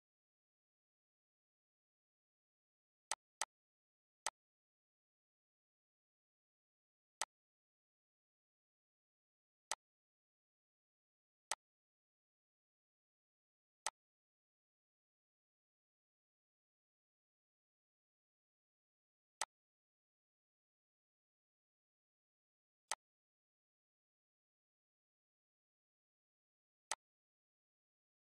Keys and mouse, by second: 3.4 click, 6.6 click, 9.9 click, 10.8 click.